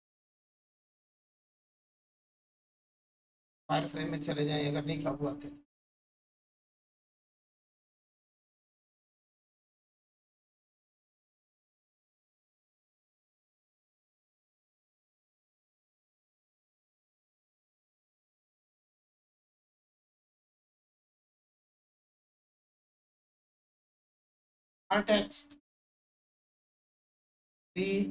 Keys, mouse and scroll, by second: 1.3 right click, 1.3 right click, 3.0-5.7 drag, 5.7 right click, 7.3 click, 7.3-10.8 drag, 16.5-17.7 scroll down 1, 17.7-20.3 alt+drag, 23.1 click, 26.5 scroll down 1, 26.5 3.